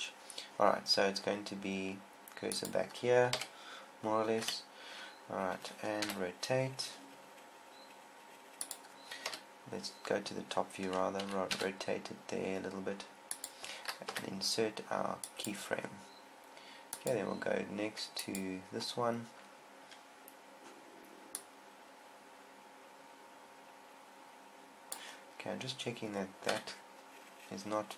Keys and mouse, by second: 3.0-4.8 drag, 3.8 KP_7, 4.8 KP_1, 6.5 r, 9.1 click, 9.7 KP_7, 11.7 r, 14.0-15.6 drag, 14.6 i, 17.9-23.6 drag, 26.9 KP_1.